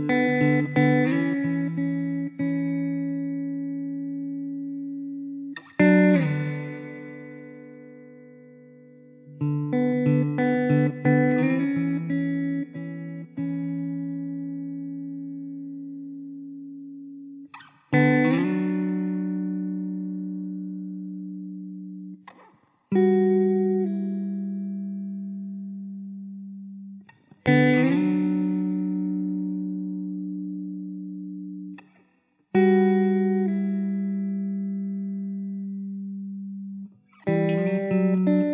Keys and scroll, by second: 0.3 Tab, 4.0 shift+d, 7.3 Tab, 8.6 l, 11.3 alt+z, 11.9 `, 17.6 alt+z, 17.7 Tab, 18.8 alt+z, 19.5 Tab, 21.4 l, 22.3 shift+d, 25.2 ctrl+z, 26.7 shift+d, 30.8 shift+d, 33.3 x, 34.0 l, 34.3 x, 34.9 alt+z, 35.4 Tab, 35.9 Tab, 36.7 alt+z, 37.8 alt+z.